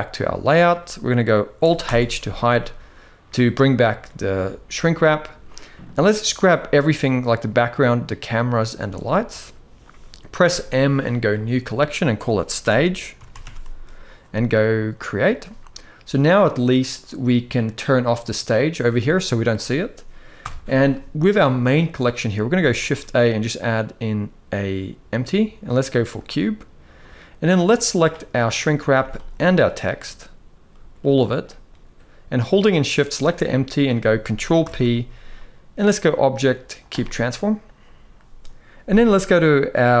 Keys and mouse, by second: 1.5 alt+h, 3.7-4.0 middle drag, 4.6-4.9 middle drag, 5.5-6.0 drag, 6.9 shift+click, 8.7-9.1 middle drag, 10.1 m, 15.9 click, 18.8-19.1 middle drag, 20.1 KP_1, 22.5 shift+a, 26.8-27.2 middle drag, 28.0 middle click, 28.6 z, 29.4 shift+click, 30.4 middle drag, 31.1 drag, 32.7 shift+click, 33.1-33.4 middle drag, 34.3 ctrl+p, 39.9-40.0 drag.